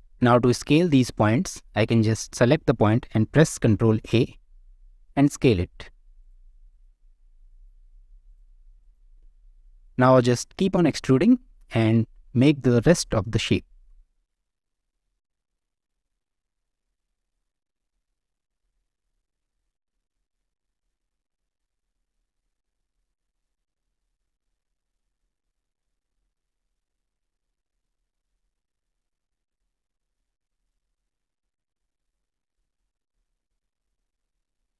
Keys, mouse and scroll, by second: 1.1 drag, 1.3 Tab, 1.8 click, 4.1 ctrl+a, 6.7 click, 7.6 ctrl+a, 8.8 click, 9.2 ctrl+a, 14.1 alt+middle click, 14.2 alt+middle click, 14.5 shift+middle click, 14.8 click, 14.8 middle click, 15.1-18.4 typing, 15.3 alt+middle click, 15.5 alt+middle click, 15.6 shift+middle click, 15.7 click, 16.0 click, 16.3 click, 16.7 click, 17.1 click, 17.3 middle click, 17.7 click, 17.9 shift+click, 18.8 alt+shift+middle click, 19.0 click, 19.4 middle click, 19.5 middle click, 19.7 click, 19.8-22.6 typing, 20.0 middle click, 20.6 click, 20.9 middle click, 21.2 shift+middle click, 21.7 click, 21.9 click, 22.3 click, 22.4 middle click, 22.7 middle click, 22.9 middle click, 23.1 shift+middle click, 23.2 middle click, 23.3 click, 23.6 ctrl+a, 24.0 click, 24.1 ctrl+a, 24.4 alt+middle click, 24.7 shift+middle click, 24.9 shift+middle click, 25.3 click, 25.3 middle click, 25.5 click, 25.6 middle click, 25.7 e, 26.0 e, 26.2 click, 26.3 e, 26.5 click, 26.8 ctrl+a, 27.1 click, 27.1 ctrl+a, 27.3 scroll down 1, 27.3 middle click, 27.5 middle click, 27.7 click, 27.9-29.9 typing, 28.2 ctrl+z, 28.7 click, 28.8 middle click, 29.0 click, 29.8 click, 30.2 shift+click, 30.4 ctrl+a, 30.8 middle click, 30.9 click, 31.2 ctrl+a, 31.4 click, 31.6 ctrl+a, 31.9 click, 32.1 g, 32.3 middle click, 32.5 click, 32.6 g, 32.9 middle click, 33.0 click, 33.1 middle click, 33.5 g, 33.8 ctrl+a, 34.0 scroll down 1, 34.0 middle click, 34.2 Tab, 34.2 click, 34.3 scroll up 1, 34.3 middle click.